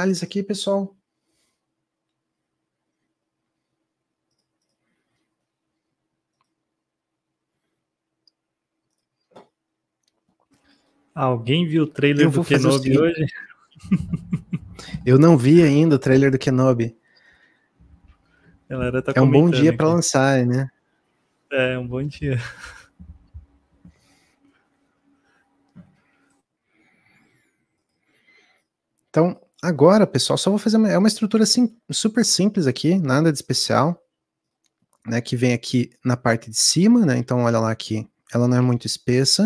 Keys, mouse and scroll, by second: 13.0 shift+a, 17.3 scroll down 2, 17.7 shift+middle click, 18.0-18.5 scroll up 3, 18.5-27.1 middle drag, 27.1 click, 27.4 middle click, 27.6 scroll up 1, 27.7-37.7 middle drag, 37.7 s.